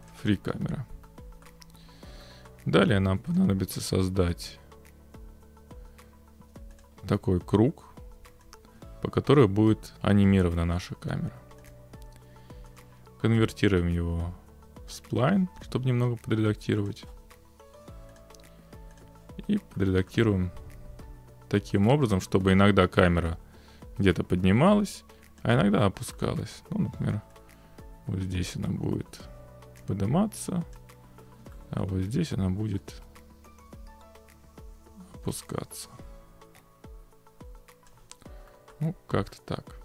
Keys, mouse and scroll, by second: 0.1 click, 1.4 middle click, 1.8 middle click, 2.9 scroll, 3.4 click, 6.8 click, 7.9 click, 9.9 click, 11.7-12.8 drag, 12.8-13.9 middle drag, 15.0-16.9 drag, 18.2 click, 19.0 click, 20.1 middle click, 21.8 middle click, 22.0 middle click, 25.4 click, 26.4 middle click, 29.8 click, 30.7 click, 31.9 middle click, 37.9 click, 38.7 scroll.